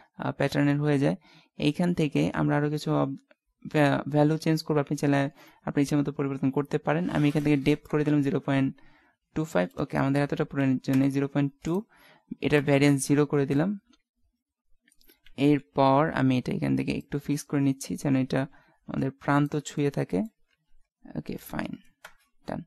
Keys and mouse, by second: 7.3-10.7 drag, 11.7-13.6 drag, 13.6 middle click, 15.1 KP_1, 15.3 KP_3, 15.5 KP_5, 17.2-18.8 drag, 19.8-20.9 middle drag, 20.5 KP_5, 21.0 middle click, 22.1 KP_0.